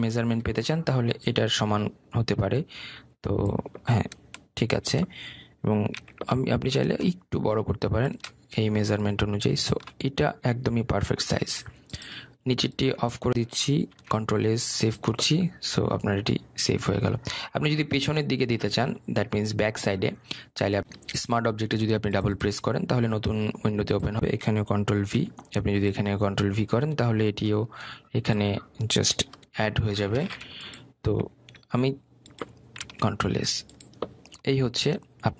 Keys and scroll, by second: 1.1 Return, 7.0 ctrl+t, 15.0 ctrl+s, 26.0 ctrl+v, 30.6 Return, 33.8 ctrl+s.